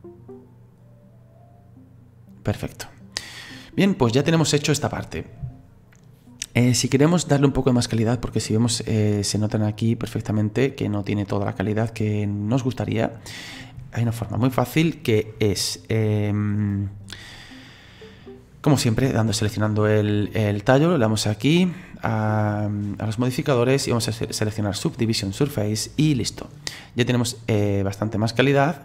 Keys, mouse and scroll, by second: 3.9 click, 4.3-8.1 middle drag, 8.1-8.7 scroll up 1, 8.7-10.9 middle drag, 10.9 scroll down 2, 11.7-14.7 middle drag, 19.3 right click, 21.3 click, 23.5-26.5 drag, 26.7 middle click, 27.4-27.8 scroll up 2, 27.8-28.8 scroll down 1.